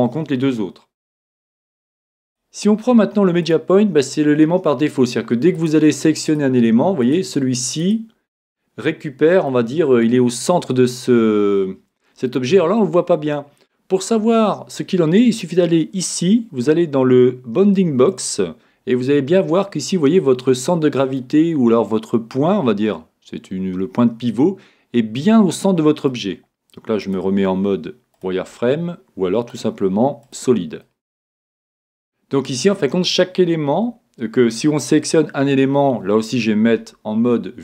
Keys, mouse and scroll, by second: 2.2-4.2 drag, 5.5-9.6 right drag, 8.4-10.2 middle drag, 12.3-14.1 middle drag, 16.0-17.9 drag, 18.9-20.7 middle drag, 25.0-26.8 middle drag, 27.0-28.9 drag, 29.5-31.4 drag, 30.8 middle click, 31.2-32.5 middle drag, 32.5 right click, 36.7 KP_7.